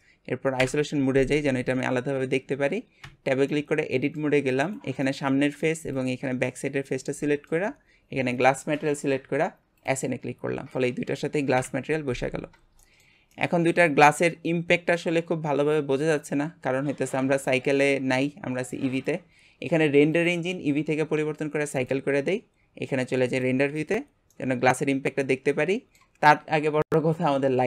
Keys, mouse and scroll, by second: 0.6 KP_Divide, 1.6-3.0 scroll up 1, 3.0 Tab, 3.5-4.7 middle drag, 4.7 click, 5.0-6.0 middle drag, 6.0 shift+click, 6.4-8.3 middle drag, 8.3 click, 9.8 click, 10.5 Tab, 11.5 KP_Divide, 12.3 scroll down 1, 12.8-15.4 shift+middle drag, 15.4-16.0 scroll up 2, 16.0-21.9 middle drag, 21.9-23.5 drag, 24.7-27.6 middle drag.